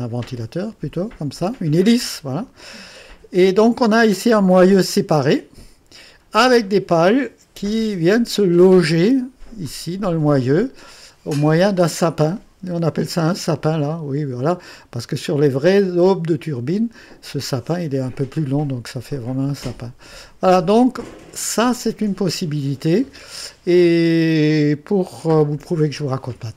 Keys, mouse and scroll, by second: 1.4-2.4 drag, 4.9 click, 6.9-8.4 drag, 9.6 click, 11.4 click, 12.3 click, 15.2 click, 16.3 click, 19.1-19.8 drag, 19.8-20.8 drag, 21.0-22.4 drag, 24.4 click.